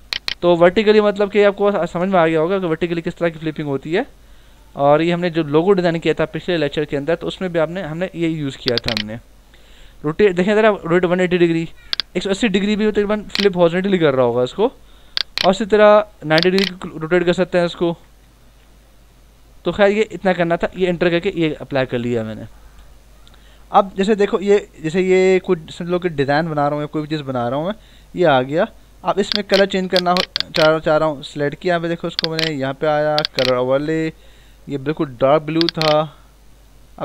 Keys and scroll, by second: 4.1 Right, 5.1 Left, 14.8 ctrl+z, 18.4 ctrl+z, 20.6 Return.